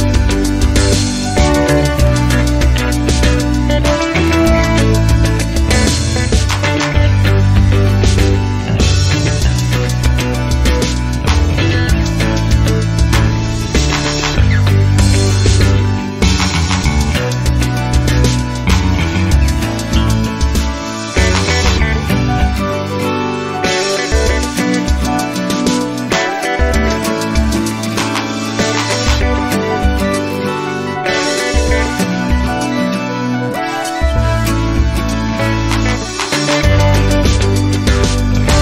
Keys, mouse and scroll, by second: 0.9 click, 2.2 click, 3.2 click, 3.7-8.7 typing, 4.2 click, 5.1 click, 5.9 click, 6.7 click, 7.5 click, 8.3 click, 9.2 click, 9.8 space, 11.0 click, 11.7 space, 12.6 click, 14.2 click, 16.6 click, 19.3 ctrl+click, 20.3 ctrl+click, 21.4 ctrl+click, 22.3 ctrl+click, 23.2 click, 27.1 click, 28.5 ctrl+click, 29.5 ctrl+click, 30.5 ctrl+click, 33.2 click, 35.8 ctrl+click, 37.8 ctrl+click.